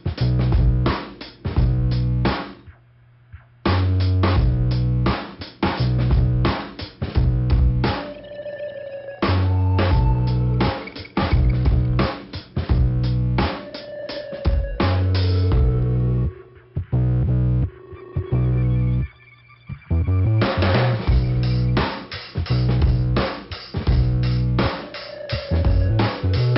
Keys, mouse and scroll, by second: 0.1-0.4 scroll up 1, 1.0 click, 1.9 click, 2.5 scroll up 2, 5.3 click, 6.2 click, 7.8 click, 8.8 click, 8.9 click, 10.4 click, 12.3 click, 14.2 scroll down 2, 15.2 scroll up 1, 15.7 click, 17.5 click, 18.2-18.8 scroll down 1, 20.0 middle click, 22.4 middle click, 24.3 click, 26.4 click.